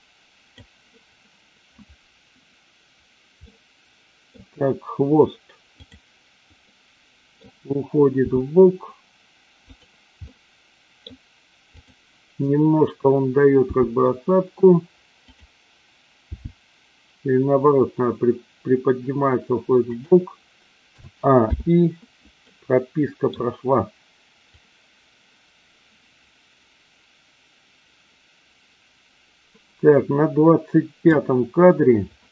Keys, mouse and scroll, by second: 3.3 middle click, 5.7 click, 6.7 middle click, 8.2 r, 9.7 click, 10.2-11.1 middle drag, 11.1 scroll down 1, 11.7 click, 13.6 g, 15.2 click, 16.2 g, 20.0 click, 20.9 a, 21.4 i, 22.4-23.3 middle drag, 24.4-31.1 drag.